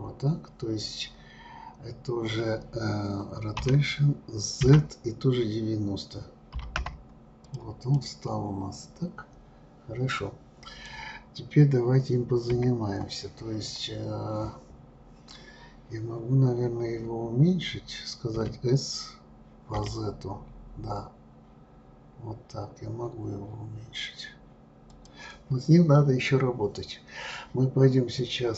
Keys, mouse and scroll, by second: 3.6 r, 7.9-10.9 middle drag, 12.5 KP_1, 18.4 s, 28.2-28.5 drag.